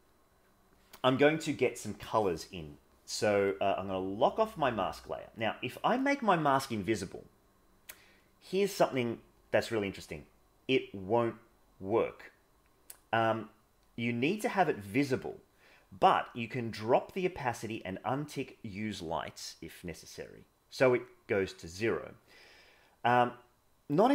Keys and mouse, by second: 0.2 middle click, 5.8 click, 17.9-20.9 drag.